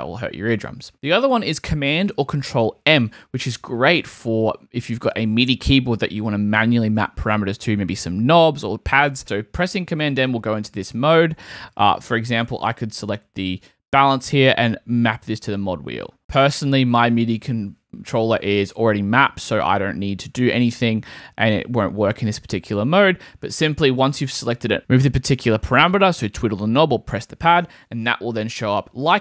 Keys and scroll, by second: 0.9 super+k, 9.6 super+m.